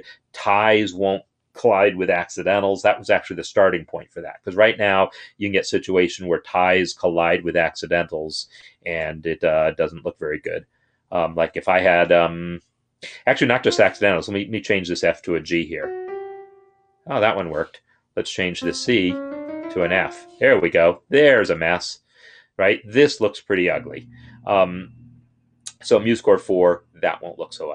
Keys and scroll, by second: 15.5 Up, 15.7 Up, 18.8 Up, 19.0 Up, 19.2 Up, 19.3 Up.